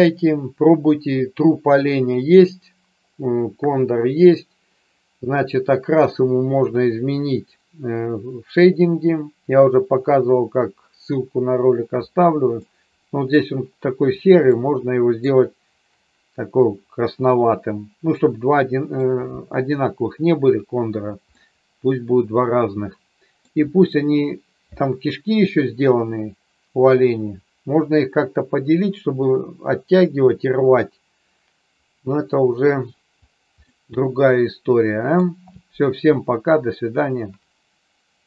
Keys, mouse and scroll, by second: 12.6 middle click, 14.5-15.2 middle drag, 18.2-18.9 middle drag, 21.3-23.3 middle drag, 33.6-35.2 middle drag.